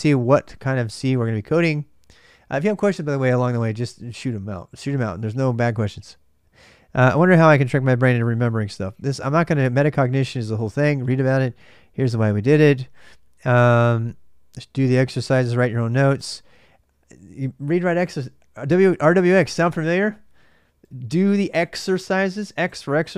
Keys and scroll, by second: 0.0 ctrl+[, 0.0 ctrl+j, 0.0 a, 0.0 BackSpace.